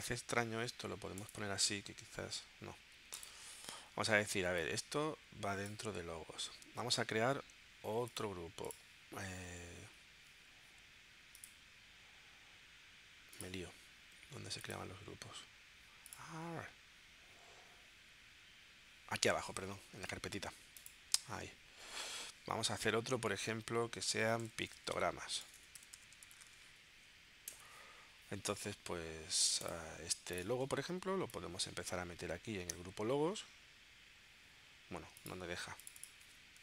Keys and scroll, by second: 24.0-26.9 typing, 27.6 Return.